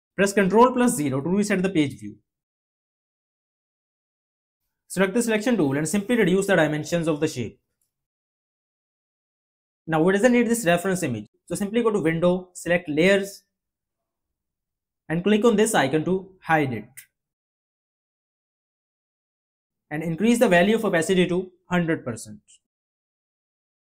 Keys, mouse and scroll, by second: 0.1 ctrl+0.